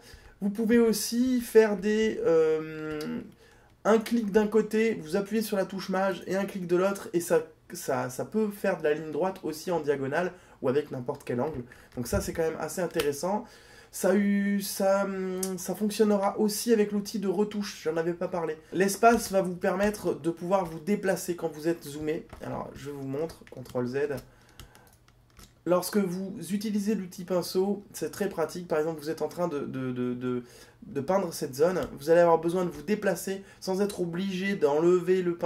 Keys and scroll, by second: 18.7 space.